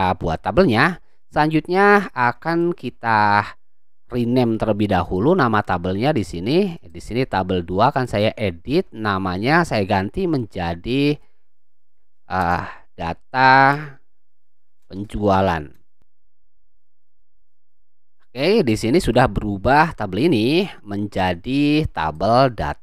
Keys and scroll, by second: 12.4 BackSpace, 13.6-17.2 typing.